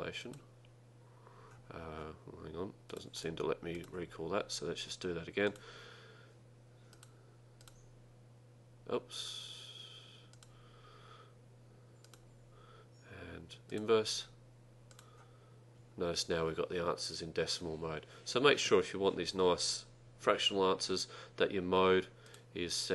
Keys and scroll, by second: 0.3 Left, 5.5 Return, 12.1 Right, 15.0 Return.